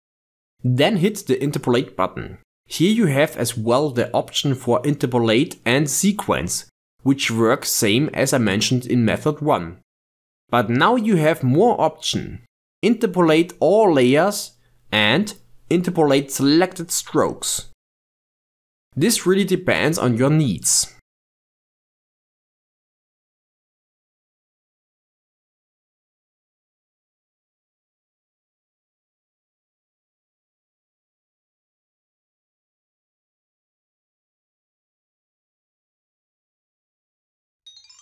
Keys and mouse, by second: 2.6-5.6 drag, 16.9 click, 17.4-18.9 drag, 23.1-24.4 drag, 25.2-26.7 drag, 28.4-30.6 drag, 31.3-31.7 drag, 31.7 ctrl+Tab, 33.3-34.8 drag, 35.3-37.9 drag.